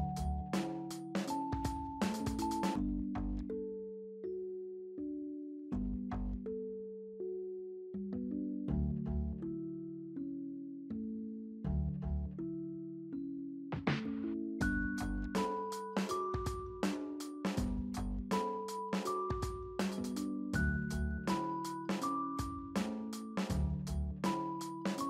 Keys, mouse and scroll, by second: 0.6 double click, 1.5 right click, 8.9-9.8 typing, 10.8-11.4 typing.